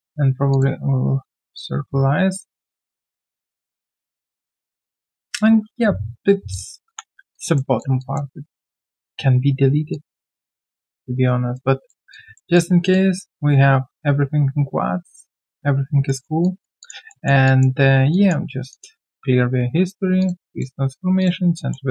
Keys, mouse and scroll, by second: 2.3 alt+click, 3.0 alt+right click, 3.8 alt+click, 5.4 alt+right click, 5.8 q, 6.1 alt+scroll down 1, 6.8 3, 7.3 alt+click, 8.0 alt+click, 8.3 alt+right click, 9.9 alt+click, 11.2 alt+right click, 12.1 alt+click, 12.9 alt+click, 16.0 alt+middle click, 16.4 alt+click, 17.1 alt+middle click, 17.4 alt+click, 18.4 alt+click, 18.4 alt+scroll down 1, 18.7 alt+click, 21.5 alt+middle click.